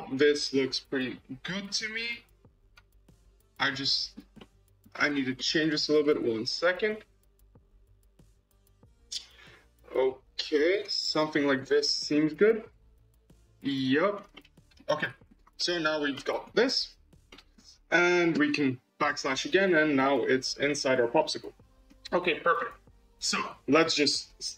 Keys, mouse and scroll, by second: 0.0-1.9 middle drag, 1.9 click, 2.9 scroll up 2, 3.5 scroll up 1, 3.7-4.9 middle drag, 4.9-5.2 scroll up 2, 5.2-6.4 middle drag, 6.4-9.0 shift+drag, 11.0-11.5 scroll down 10, 11.5-15.3 middle drag, 15.3-16.1 scroll up 3, 15.5-15.9 middle drag, 16.1-16.5 shift+middle drag, 16.5-17.2 scroll up 4, 17.2 shift+middle click, 17.6-18.4 scroll down 6, 19.0 /, 19.5-20.5 middle drag, 20.5-20.8 scroll up 3, 20.8 scroll down 2, 21.1-22.5 middle drag, 22.5 KP_0, 24.0-24.4 middle drag, 24.4-24.5 scroll down 9.